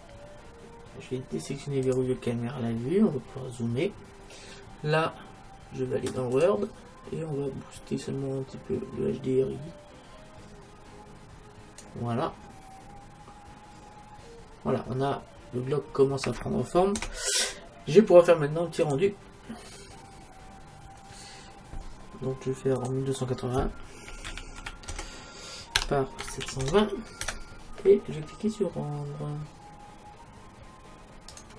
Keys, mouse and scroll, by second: 1.9-3.8 drag, 2.7-5.4 middle drag, 6.4-9.9 drag, 12.7-14.3 middle drag, 17.0 KP_0, 18.9-20.7 drag, 22.9-24.5 drag, 31.4 click.